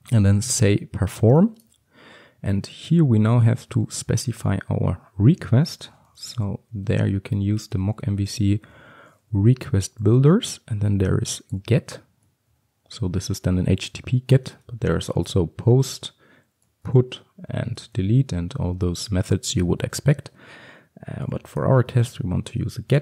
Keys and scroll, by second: 2.2 Return, 9.7 Return, 22.0 Return.